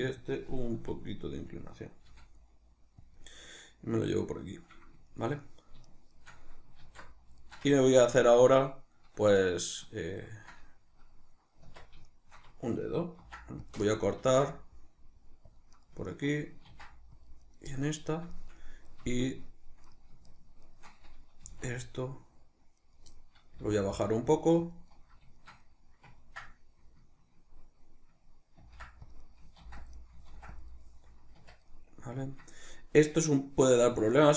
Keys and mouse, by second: 0.3 click, 0.8 r, 1.6 click, 2.1 g, 3.2 click, 5.1-5.9 shift+middle drag, 5.9 shift+right drag, 6.2 shift+right drag, 6.8 alt+q, 7.4-14.0 shift+middle drag, 11.6 Tab, 13.2 ctrl+r, 14.0 right click, 14.2 ctrl+r, 15.8 right click, 16.7 ctrl+r, 17.5 right click, 17.7 middle click, 18.6-19.9 middle drag, 19.9 right click, 20.3 shift+right click, 20.6 shift+right click, 21.4 g, 22.9 right click, 23.2-24.8 middle drag, 23.6 g, 24.8 click, 24.9-29.3 middle drag, 28.6 ctrl+r, 29.3 right click, 29.6 ctrl+r, 30.1 right click, 30.3 ctrl+r, 30.8 right click, 31.3 Tab, 31.7-34.3 middle drag.